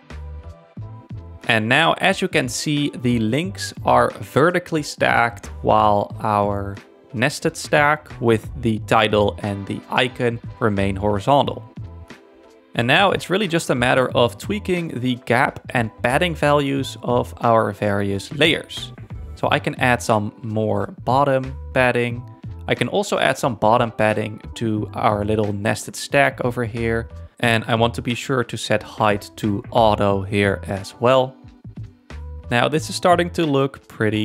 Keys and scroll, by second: 11.4 1, 11.9 Return, 14.4 8, 14.4 Return, 17.6 Tab, 18.4 4, 18.7 Return, 25.2 Tab, 25.6 1, 25.9 Return.